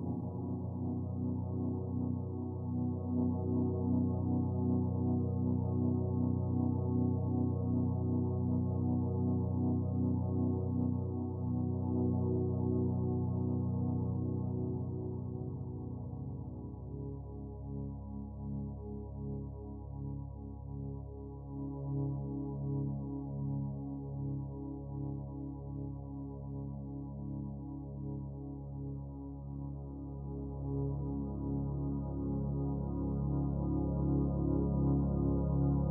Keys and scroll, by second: 27.6 ctrl+z.